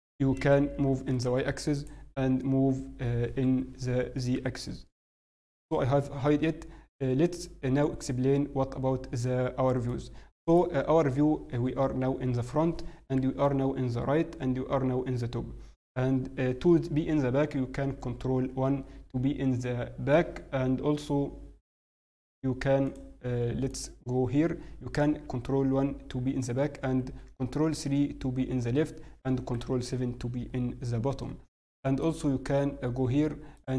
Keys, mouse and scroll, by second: 0.9 g, 4.3 h, 9.8 middle click, 15.7-16.1 scroll down 1, 18.3-19.1 scroll down 4, 23.6 click, 31.7 shift+middle click, 31.7-32.2 scroll up 7, 33.5-33.7 click.